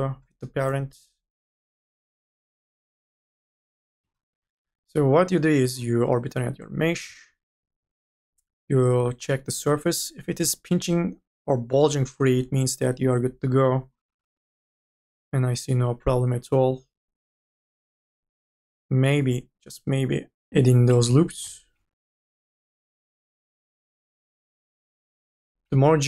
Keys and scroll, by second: 2.1 r, 20.7 2, 21.9-26.0 typing.